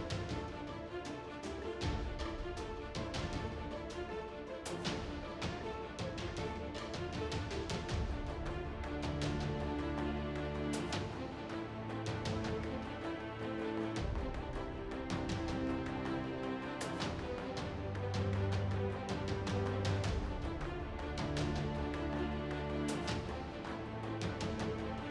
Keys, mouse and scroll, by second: 0.2 KP_1, 2.1 ctrl+Tab, 4.6 shift+right click, 6.5 a, 6.7 g, 8.2 a, 8.6 ctrl+Tab, 11.0 ctrl+Tab, 18.6 ctrl+r, 20.2 right click, 20.9 g, 22.2 ctrl+Tab.